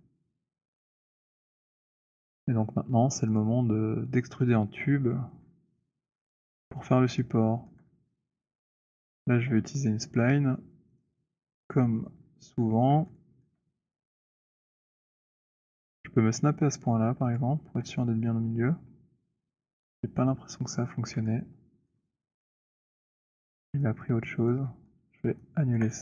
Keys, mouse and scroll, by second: 0.1-1.8 scroll, 2.1-2.9 scroll, 3.3 click, 5.3 scroll, 6.0 scroll, 7.9 alt+scroll, 8.6-11.1 alt+middle click, 11.0 click, 12.1 middle click, 12.6 middle click, 13.4 alt+middle click, 13.8 middle click, 14.2 middle click, 16.6 v, 17.2 v, 17.4 click, 17.4 v, 20.0-20.5 middle click, 20.2 middle click, 22.0 alt+middle click, 22.9 alt+right click, 23.7 alt+middle click, 24.6 alt+right click, 25.4 alt+middle click, 25.7 alt+right click.